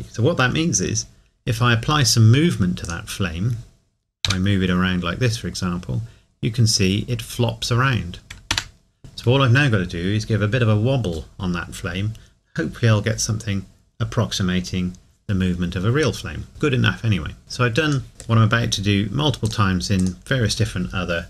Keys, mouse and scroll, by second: 2.8 click, 4.3 g, 8.5 Escape, 17.4 click, 18.1 scroll down 1, 19.4 click.